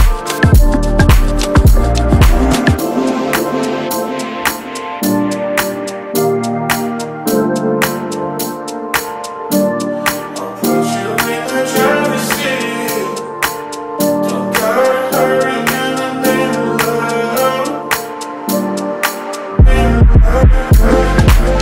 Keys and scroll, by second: 6.7 Tab, 7.0 ctrl+c, 7.3 Tab, 7.9 ctrl+v, 13.8 Tab, 16.2 ctrl+c, 16.6 Tab, 17.4 ctrl+v, 19.2 Tab.